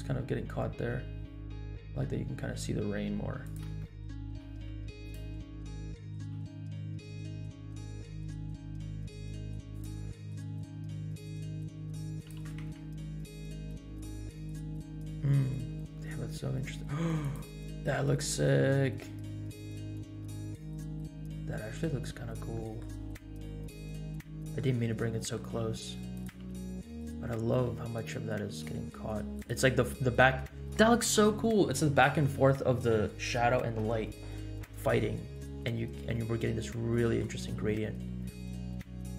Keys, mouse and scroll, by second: 0.3 scroll down 1, 0.8 g, 3.9 shift+middle click, 4.2 g, 5.2-5.6 scroll down 3, 5.9 shift+middle click, 6.2 g, 10.1 middle click, 10.8 g, 12.3 g, 18.1 shift+middle click, 18.5-19.0 scroll up 2, 19.1-19.5 scroll up 3, 19.8 shift+middle click, 20.9 scroll down 2, 22.2 scroll up 2, 22.5 middle click, 23.3-24.1 middle drag, 24.1 scroll down 1, 24.5 shift+middle click, 24.7-25.3 middle drag, 25.6 g, 26.3 r, 28.4 r, 30.4-30.8 scroll up 1, 33.8-34.6 scroll down 3, 36.4 middle click, 37.4 g.